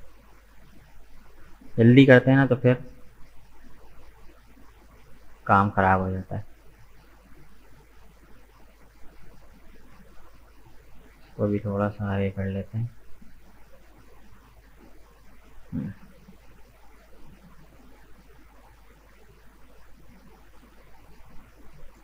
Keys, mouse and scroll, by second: 0.8-1.1 scroll down 3, 1.1-2.7 middle drag, 2.7 Tab, 2.9 right click, 3.2 middle click, 3.9 right click, 4.2 Tab, 4.4-6.2 middle drag, 6.2 right click, 7.0 shift+right click, 7.5 shift+right click, 8.0 shift+right click, 8.5 shift+right click, 9.6 shift+right click, 10.1 shift+right click, 10.5-11.6 middle drag, 11.6 g, 13.8-14.7 scroll down 1, 14.7 Tab, 14.8 right click, 15.1 middle click, 16.0-16.4 scroll up 2, 16.4-21.8 middle drag, 21.8 right click.